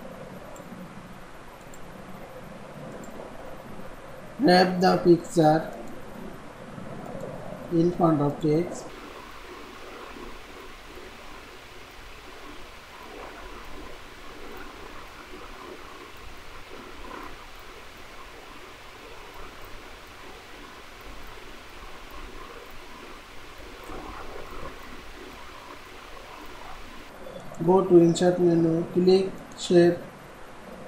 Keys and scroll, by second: 24.1 ctrl+z.